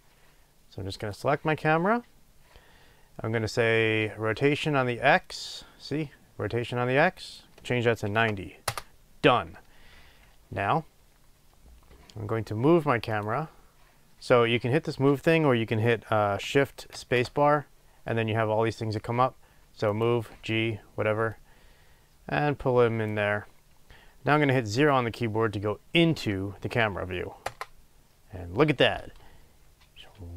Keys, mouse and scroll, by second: 1.0 click, 1.7 scroll down 1, 5.2-13.8 drag, 8.7 Return, 16.9 shift+space, 21.3-30.3 drag, 26.1 0, 27.5 KP_0.